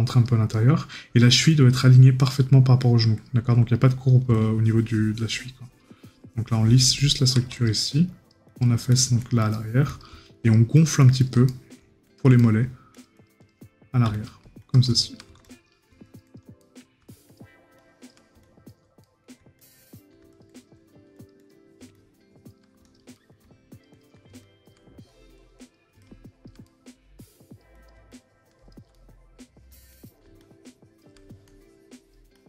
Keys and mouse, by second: 11.5 right click, 16.6 right click, 19.0 right click, 23.1 right click, 26.6 right click, 28.9 right click.